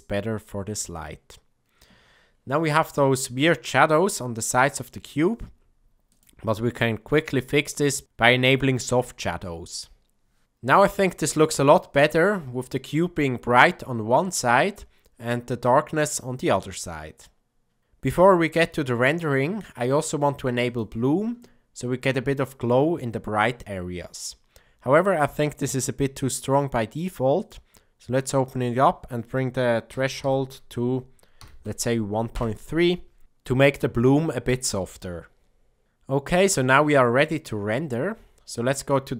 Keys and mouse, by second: 7.8 click, 9.3 click, 20.6 click, 27.3 click, 28.6-33.0 drag.